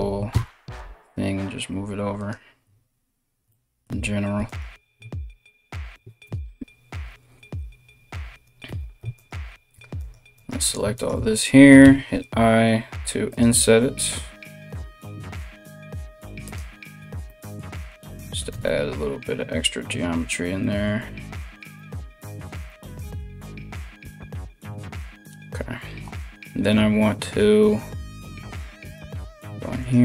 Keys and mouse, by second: 4.1 alt+right click, 5.8 KP_1, 8.3 3, 8.7 alt+right click, 9.6 shift+right click, 10.0 shift+right click, 10.5 shift+right click, 11.4 i, 14.6 alt+s, 16.4 z, 17.5 Tab, 18.1 Tab, 23.4 KP_3, 28.0 2, 28.6 right click, 28.7 middle click, 29.4 shift+right click, 29.5-30.0 shift+middle drag, 29.9 f.